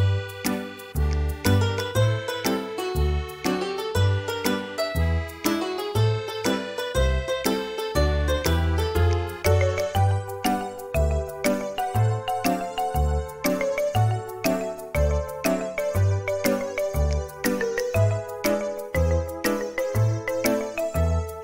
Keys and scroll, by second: 1.3 m, 9.8 space, 10.4 Escape, 15.4 space, 16.5 m, 18.6 space, 19.1 Escape.